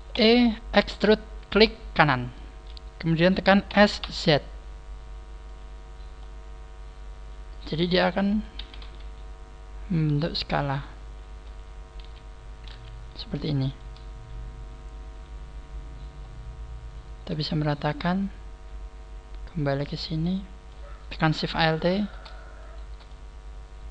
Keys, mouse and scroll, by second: 0.0 e, 2.1 right click, 3.6 s, 5.5 click, 6.1 middle click, 8.5 s, 10.6 click, 10.6 middle click, 11.9 KP_1, 12.0 click, 12.0 middle click, 12.7 scroll down 1, 13.2 shift+middle click, 13.2 scroll down 1, 15.2 click, 15.2 KP_1, 16.1-16.6 scroll up 4, 17.2 a, 19.7 click, 20.1 middle click, 21.4 alt+shift+right click, 22.5 alt+shift+right click, 23.0 middle click.